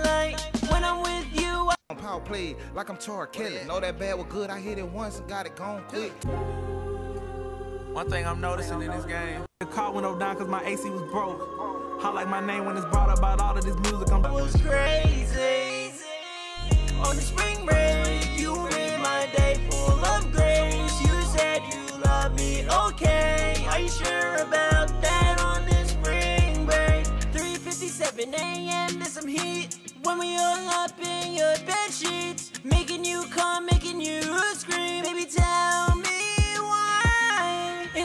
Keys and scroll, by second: 20.1 ctrl+super+w, 28.3 super+Tab.